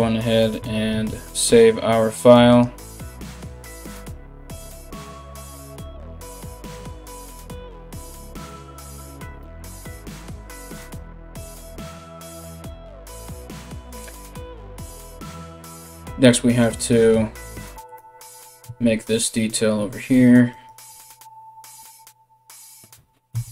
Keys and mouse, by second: 2.3-23.5 drag, 10.3 KP_1, 17.8 right click, 18.2 Tab, 20.1 right click, 22.9 KP_1.